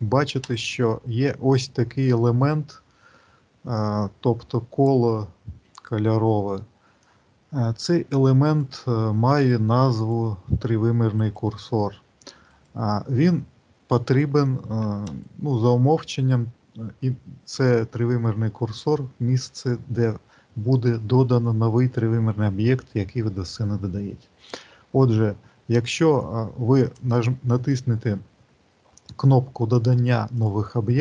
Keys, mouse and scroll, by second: 0.4 shift+right click, 8.3 shift+right click, 9.8 shift+right click, 11.0 shift+right click, 12.3 shift+right click, 14.9 shift+right click, 26.8 click.